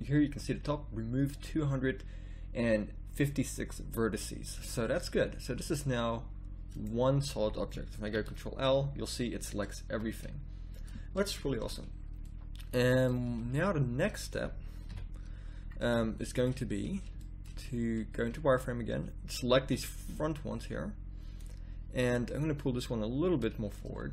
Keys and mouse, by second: 4.1 middle click, 5.1 a, 6.7-8.4 drag, 8.1 ctrl+l, 9.9 a, 13.2 z, 14.9 KP_1, 17.6 z, 19.6 b, 20.0 click, 22.4-24.1 drag.